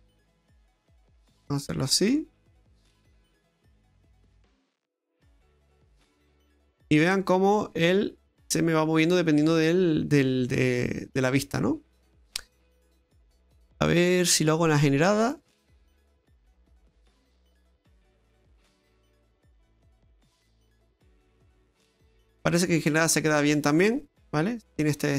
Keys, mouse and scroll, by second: 2.5 middle click, 12.7 middle click, 13.3-13.9 scroll up 5, 13.9 middle click, 14.8 click, 16.3 click, 19.1 middle click.